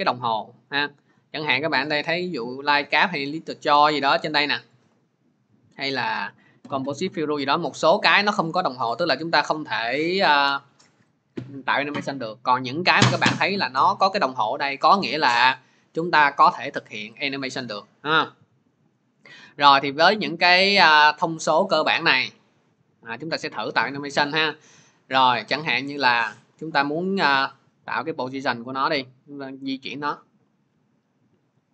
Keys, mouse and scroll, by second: 0.5 click, 2.8 click, 3.4-4.0 scroll, 6.5 click, 7.4 click, 12.3 scroll, 12.9-13.4 scroll, 14.7-15.7 scroll, 17.1 click, 20.4 click, 21.5 shift+click, 22.7 click, 27.5 click.